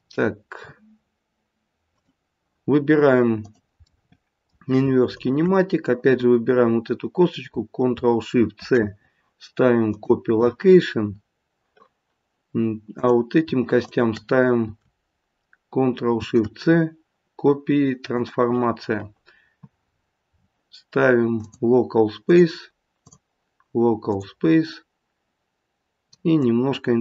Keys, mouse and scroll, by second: 0.2-1.6 scroll down 1, 1.8 click, 3.4 click, 3.8 middle click, 5.2 shift+click, 5.7 shift+click, 8.5 ctrl+shift+c, 12.9 click, 13.8 shift+click, 16.1 ctrl+shift+c, 19.8-21.3 scroll down 7, 21.3 click, 21.3-23.0 scroll down 2, 23.0 click, 26.3 click.